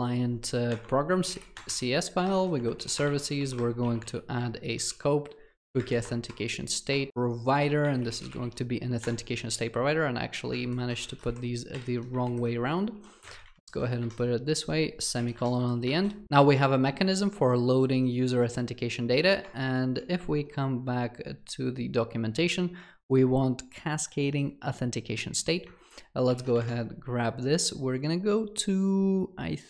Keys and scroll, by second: 1.5 ctrl+c, 2.6 Return, 4.9 ctrl+v, 9.0 Return, 11.0 ctrl+shift+Left, 11.1 ctrl+x, 12.9 ctrl+v, 13.5 Escape.